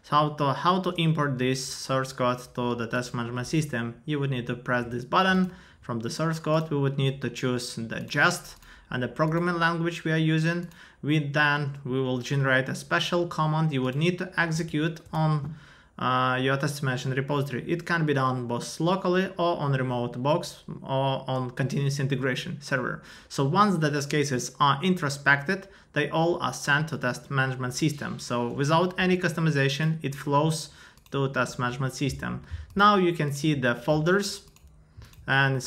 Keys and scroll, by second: 14.5 super+v, 15.0 Return.